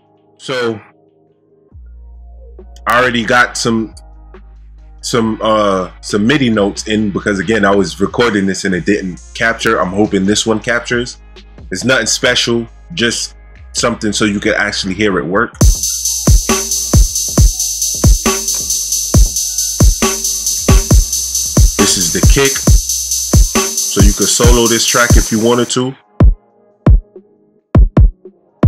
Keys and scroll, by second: 15.5 space.